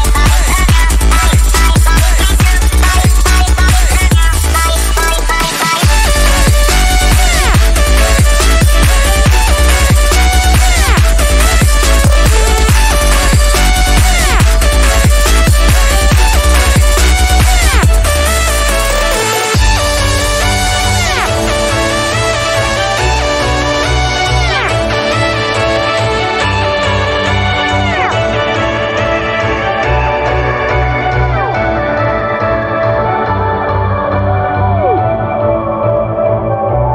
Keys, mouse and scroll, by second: 2.3-4.0 scroll up 1, 4.3 click, 8.0-8.6 scroll down 1, 9.8 scroll down 1, 10.9 scroll up 1, 18.9-20.2 scroll down 1, 20.2-20.7 scroll down 1, 22.0 scroll up 1, 23.0 scroll down 1, 25.2-36.6 drag, 36.6-36.9 drag.